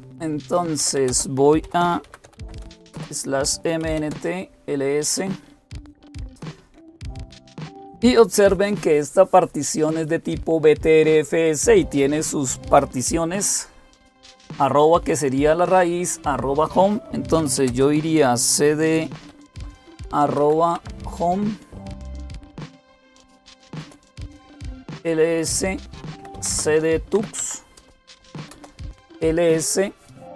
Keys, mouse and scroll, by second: 0.4-4.1 typing, 2.7 Return, 17.0-17.9 typing, 19.1-20.7 typing, 23.6 Return, 24.2-28.7 typing.